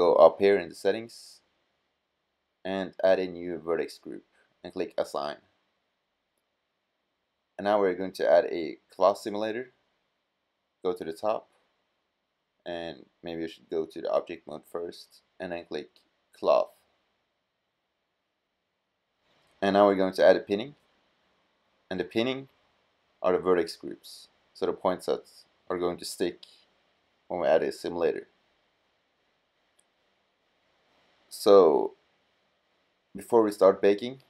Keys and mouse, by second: 6.4 click, 8.7-10.4 drag, 10.4-12.3 middle drag, 13.6-15.1 drag, 18.1-19.6 drag, 25.9-29.1 middle drag.